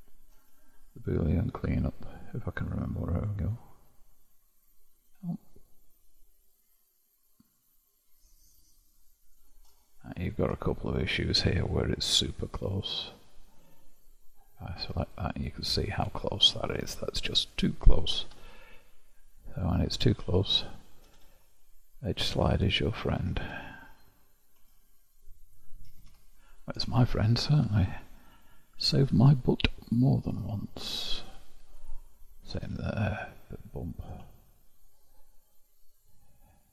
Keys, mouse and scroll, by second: 5.8-6.5 scroll up 1, 6.5-9.5 middle drag, 9.9-12.7 shift+middle drag, 12.7 click, 15.0 click, 15.5 middle click, 16.3-16.9 scroll up 2, 16.9-18.3 shift+middle drag, 18.3 g, 20.5 click, 21.1 g, 22.9 click, 25.4 click, 25.9 g, 26.7-27.7 scroll down 1, 27.7-30.7 shift+middle drag, 31.7 click, 32.5 g, 34.3-36.7 shift+middle drag.